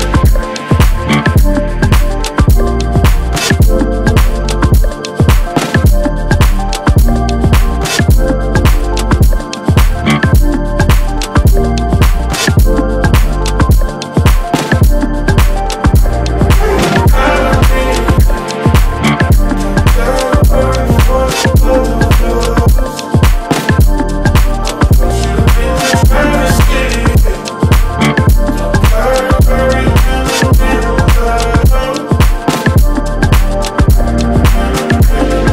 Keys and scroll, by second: 0.1 ctrl+c, 0.4 Tab, 1.1 ctrl+v, 3.4 space, 4.4-5.7 typing, 8.1 shift+y, 8.2 o, 8.3 u, 8.4 r, 8.6 Escape, 9.9 shift+s, 10.1 t, 10.2 y, 10.5 l, 11.0 Escape, 12.8 4, 12.9 5, 13.1 Return, 25.0 Up, 34.1 Right.